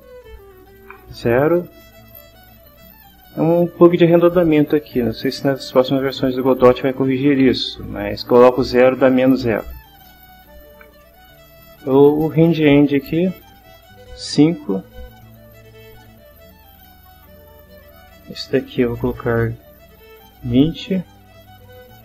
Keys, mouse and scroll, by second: 0.4 click, 1.3 0, 2.1 click, 12.0 click, 14.2 5, 15.8 click, 17.6 click, 19.0 2, 19.3 0, 20.5 Return, 21.5 click.